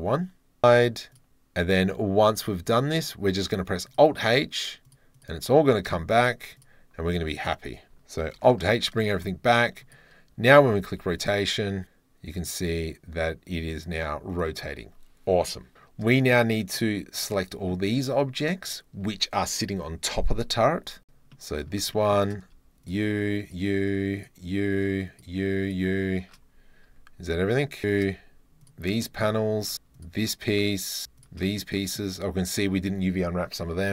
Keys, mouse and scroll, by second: 0.6 h, 2.3 click, 2.7 click, 3.9-5.0 drag, 6.0 h, 6.6 click, 8.4 alt+h, 8.7 click, 9.0-9.8 middle drag, 9.0 scroll, 10.0-12.3 middle drag, 10.6 r, 10.9 z, 14.3 click, 16.2 shift+middle click, 16.8 click, 17.3-17.7 middle drag, 21.3-21.6 middle drag, 21.9 shift+click, 22.8 shift+click, 23.4 shift+click, 24.1 shift+click, 25.0 shift+click, 25.6 shift+click, 26.9 g, 28.1 g, 28.6 shift+click, 29.0 middle drag, 29.9 shift+click, 31.1 shift+click, 31.5 click.